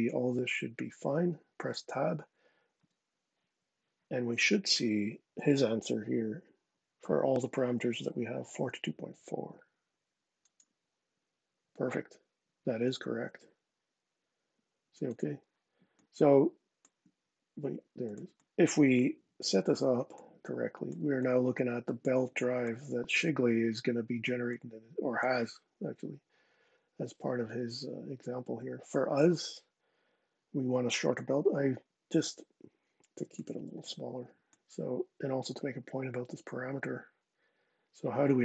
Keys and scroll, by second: 2.5 Tab.